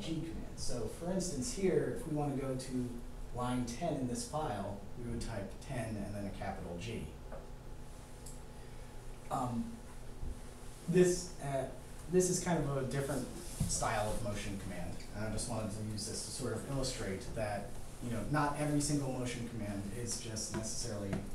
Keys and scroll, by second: 0.6 0, 2.8 g.